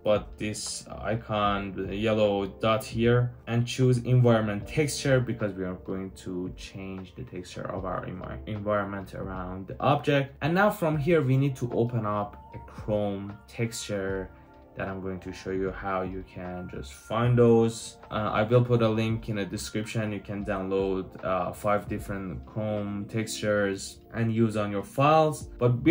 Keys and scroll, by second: 24.0-25.4 typing.